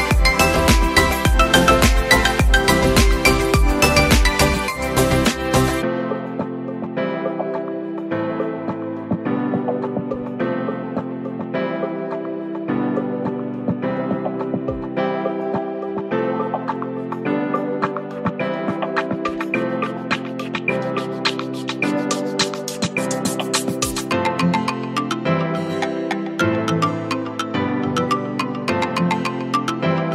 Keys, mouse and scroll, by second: 6.8 alt+shift+click.